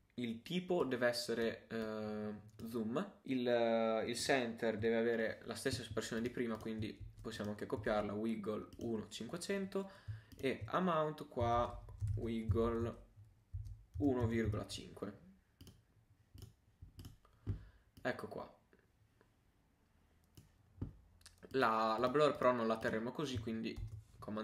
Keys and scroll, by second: 7.0 super+c, 7.9 super+v, 11.4 alt+w, 12.3-13.2 typing, 13.6 shift+Left, 23.8 super+y.